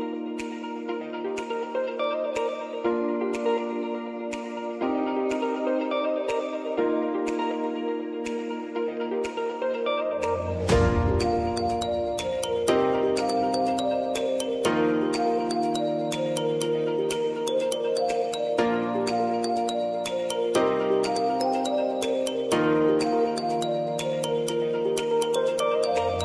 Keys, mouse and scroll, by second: 0.1 ctrl+a, 0.5-4.4 typing, 5.6 click, 10.9 ctrl+y, 11.8-14.2 typing, 16.1-16.9 typing, 16.7 click.